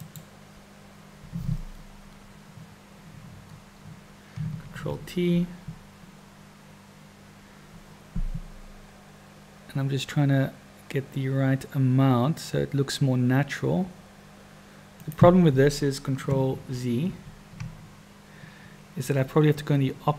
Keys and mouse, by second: 0.0 click, 4.6 ctrl+t, 16.4 ctrl+z, 17.0 ctrl+z.